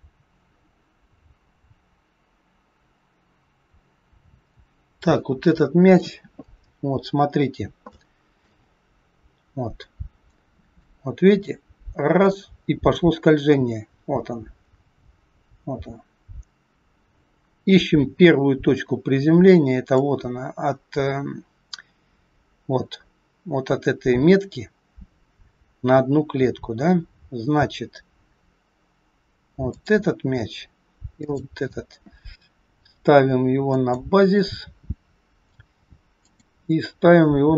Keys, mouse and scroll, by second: 5.9 click, 6.7 scroll up 2, 7.9 shift+middle click, 8.5-9.5 scroll up 4, 9.5 scroll down 3, 10.9 click, 21.8-24.8 scroll up 4, 29.8 click, 36.1 click, 37.4 g.